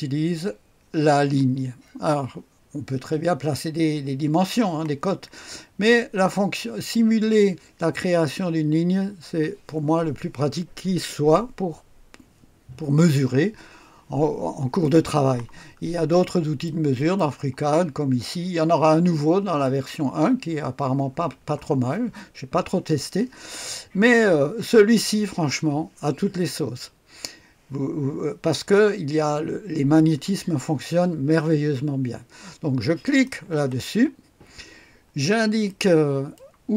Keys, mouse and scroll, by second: 15.8-16.6 scroll up 1, 16.6 right click, 33.0 click, 35.1-36.4 scroll up 1, 35.7-36.7 right drag.